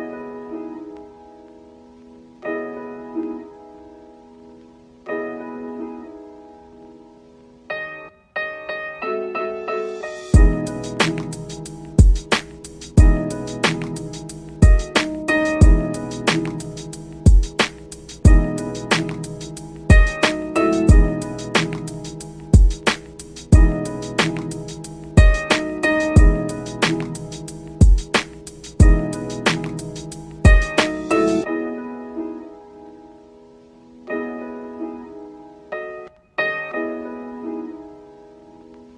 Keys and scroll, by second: 1.0 ctrl+z, 2.9 ctrl+Home, 13.9 ctrl+shift+q, 16.6 ctrl+Home, 17.0 ctrl+z, 31.6 ctrl+z.